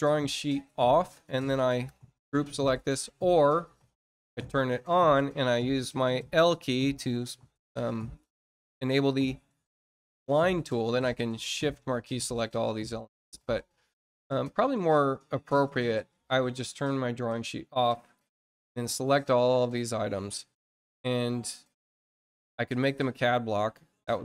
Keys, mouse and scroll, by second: 0.5 scroll down 1, 1.9 shift+click, 4.0 click, 10.7 shift+click, 13.3-13.8 scroll up 4, 17.4 click, 18.0 click, 18.8 shift+click, 20.9 scroll down 2, 21.4 middle click, 21.8 scroll up 2.